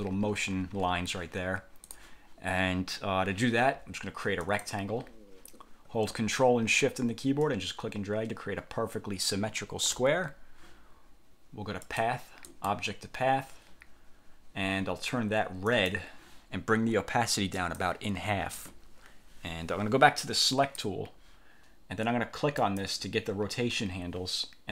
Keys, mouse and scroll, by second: 2.0 click, 4.5 click, 7.5-10.1 ctrl+shift+drag, 12.0 click, 12.6 click, 15.8 click, 17.7 click, 20.7 click, 22.7 click.